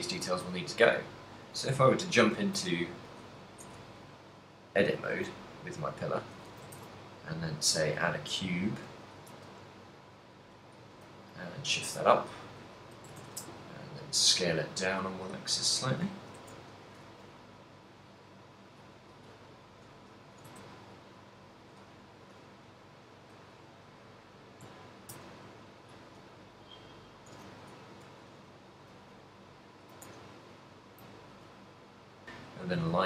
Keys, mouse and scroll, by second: 0.7 a, 1.9 shift+middle click, 2.6 shift+a, 4.4 l, 5.1 shift+s, 6.7 a, 9.2 z, 9.2 s, 10.6 right click, 10.9 g, 12.8 click, 13.0 s, 15.8 click, 16.3 s, 19.0 click, 20.5 shift+d, 23.5 click, 25.3 shift+r, 26.4 l, 27.0 l, 27.7 g, 29.4 right click, 29.9 g, 32.2 click, 32.4 middle click, 32.9 z.